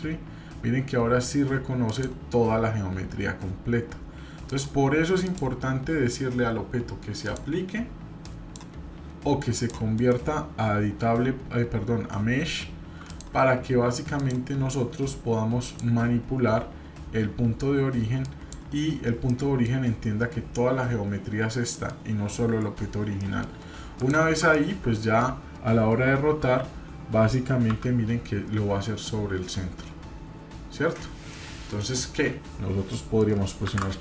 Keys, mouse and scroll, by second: 2.9-3.7 scroll up 1, 4.4 click, 5.2 click, 7.2-8.6 drag, 9.5 click, 9.9-13.5 right drag, 14.1 click, 15.6-18.5 drag, 19.3-19.7 middle drag, 21.7 middle click, 23.2 middle click, 23.9-24.4 shift+drag, 24.5-25.2 middle drag, 26.2 r, 32.5-33.2 scroll down 2, 32.9 middle click, 33.6 shift+d.